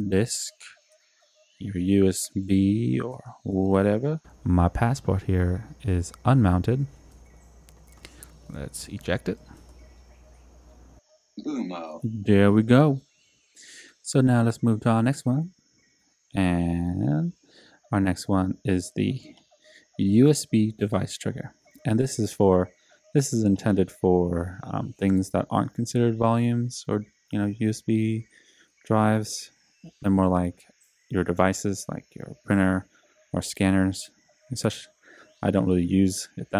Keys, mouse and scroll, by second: 0.0-0.7 typing, 2.6-3.7 typing, 5.5 click, 7.1 F5, 9.6 super+e, 13.0 F5, 15.5 click, 16.8 click.